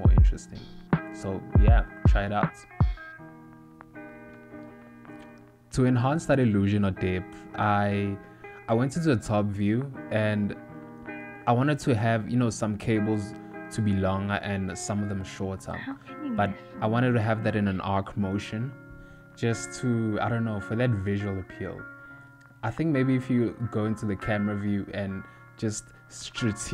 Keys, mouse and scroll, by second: 0.1 z, 1.1 click, 2.6 g, 7.0 KP_7, 8.3 click, 9.1 KP_1, 10.4 g, 12.0 scroll up 1, 12.4 middle click, 13.6 KP_7, 14.6 ctrl+middle click, 15.5 shift+middle click, 16.4 click, 16.8 g, 18.5 click, 19.1 g, 20.4 click, 21.1 click, 22.6 g, 25.4 click, 25.4 g.